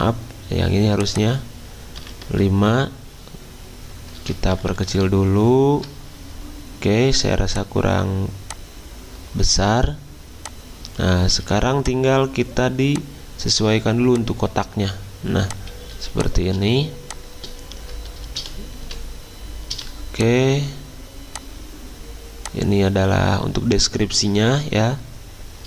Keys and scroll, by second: 1.9 5, 2.3-2.6 Return, 4.5 alt+Up, 4.7 alt+Up, 4.8 alt+Up, 5.3 alt+Up, 15.9 z, 18.4 v, 18.8 c, 19.7 v.